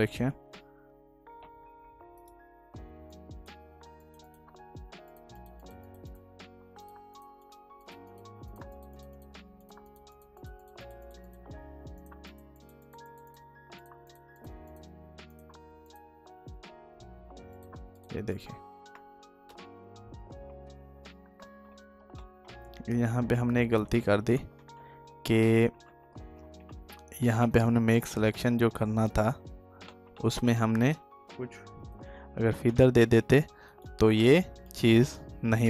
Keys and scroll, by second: 19.8 ctrl+d, 21.2 ctrl+alt+z, 29.6 ctrl+s, 31.5 ctrl+d.